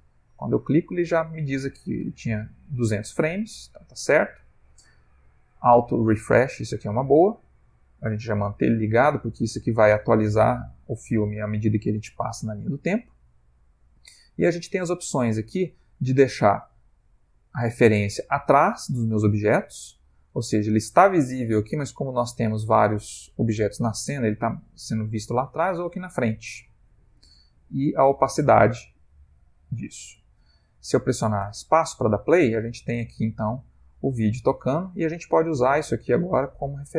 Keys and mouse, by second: 3.3 middle click, 20.3 ctrl+middle click, 26.2 click, 27.5 click, 31.6 space.